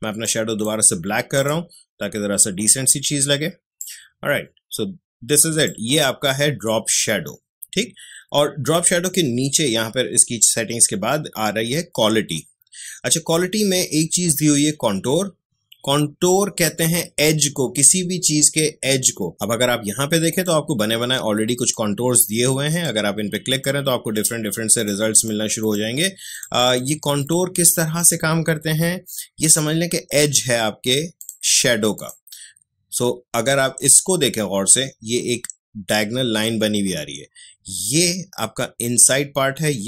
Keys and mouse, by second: 3.7-7.9 drag, 20.3 click, 31.1 click.